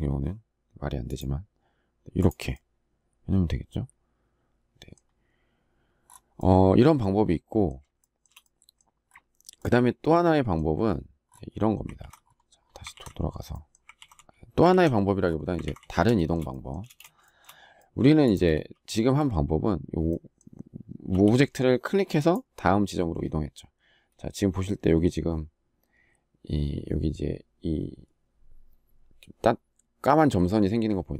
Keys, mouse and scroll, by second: 7.7 shift+middle click, 11.7 ctrl+z, 12.6 ctrl+z, 13.7 ctrl+z, 14.4 ctrl+z, 15.3 ctrl+z, 15.9 shift+middle click, 16.6 space, 17.1 shift+middle click.